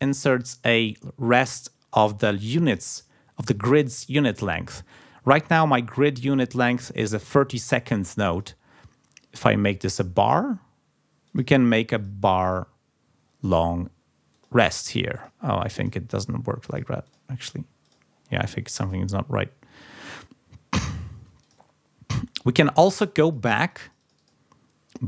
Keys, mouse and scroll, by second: 0.0 click, 0.3 click, 8.3 click, 9.8 click, 11.2 click, 11.9 click, 12.4 click, 14.3 click, 15.1 click, 15.7 click, 16.6 click, 17.0 click, 17.8 click, 21.4 click, 23.2-24.4 drag.